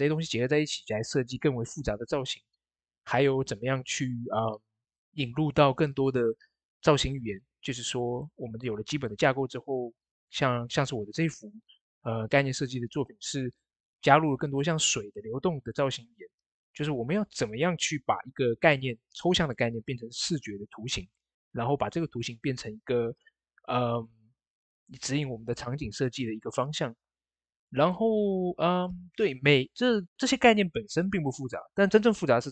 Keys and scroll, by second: 2.7-3.5 typing, 26.9-27.7 typing.